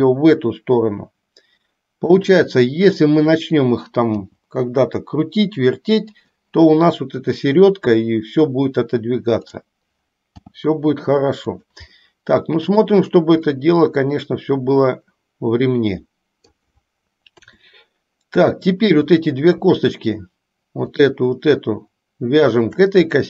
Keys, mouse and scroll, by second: 0.0 g, 3.2 click, 4.4 g, 10.6 g, 12.1-13.1 middle drag, 13.7-16.7 middle drag, 17.5 KP_7, 19.2 click, 21.0 shift+click, 22.6 shift+click.